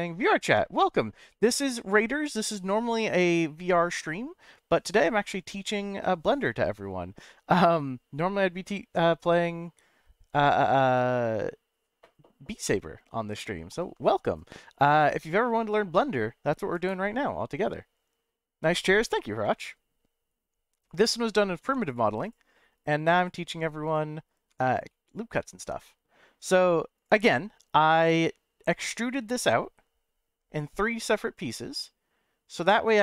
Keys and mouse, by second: 19.1-20.7 middle drag, 21.6 Tab, 21.8 click, 22.8 click, 24.5 Tab, 24.9-26.1 middle drag, 26.9 click, 31.4-32.5 middle drag, 32.9 click.